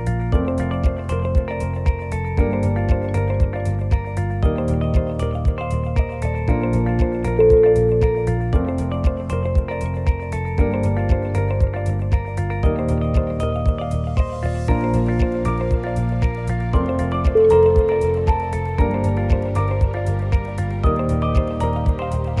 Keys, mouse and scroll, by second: 0.1 shift+middle click, 0.4 shift+middle click, 0.8 click, 1.3 shift+click, 1.9 e, 3.0 shift+middle click, 3.3 shift+middle click, 3.5 s, 10.3 click, 10.8 g, 13.2 g, 15.0 click, 15.5 g, 16.5 shift+click, 16.7 e, 19.9 click, 20.2 g, 22.3 click.